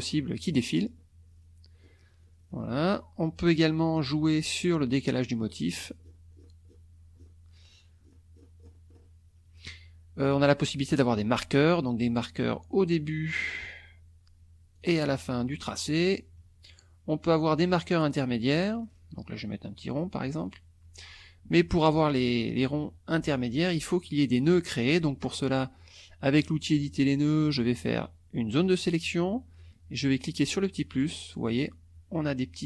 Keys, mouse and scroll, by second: 1.8 scroll up 2, 2.3-2.7 scroll down 1, 5.0-5.7 scroll up 3, 5.7-6.3 scroll down 4, 6.7-7.4 scroll down 4, 8.0 scroll down 2, 8.6-9.2 scroll up 2, 11.6 click, 13.4 click, 14.8 click, 16.0 click, 17.5 click, 18.8-19.1 scroll down 1, 20.4 click, 24.2 click, 26.2 click, 27.5-29.0 drag, 30.4 click, 30.9 click.